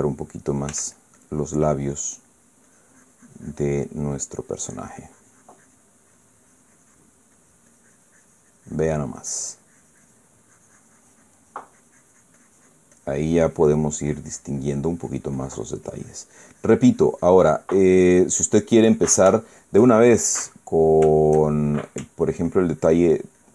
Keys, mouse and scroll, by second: 0.2 click, 1.4 f, 1.7 click, 2.7 middle click, 3.2 scroll down 1, 3.4-7.9 drag, 8.1-11.1 drag, 14.1-17.6 drag, 17.7 click, 18.6 middle click, 20.1 shift+middle click, 20.7-21.8 shift+middle drag, 21.9 shift+middle click, 23.0-23.5 ctrl+drag.